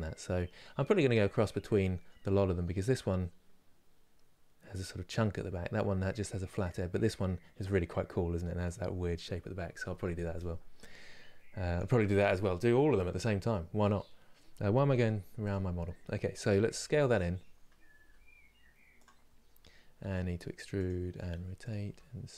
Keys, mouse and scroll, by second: 13.2-14.7 middle drag, 14.7 KP_3, 15.2 click.